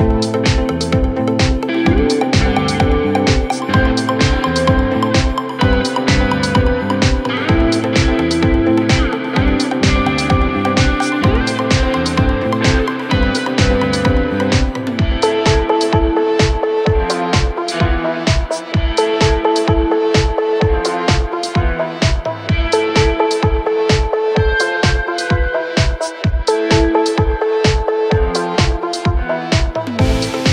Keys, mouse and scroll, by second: 4.4 ctrl+z, 11.8 ctrl+t, 21.4 Return.